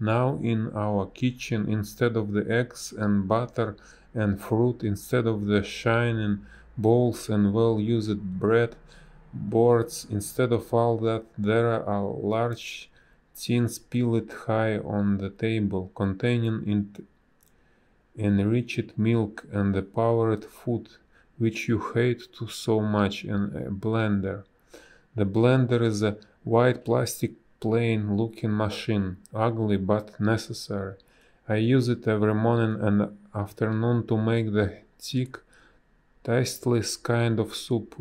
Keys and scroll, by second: 3.7 ctrl+z, 4.2 ctrl+z, 4.5 ctrl+z, 4.9 ctrl+z, 5.3 ctrl+z, 5.9 ctrl+z, 6.1 space, 9.3 ctrl+z, 9.8 space, 22.7 space, 25.1 a, 33.7 space, 37.7 space.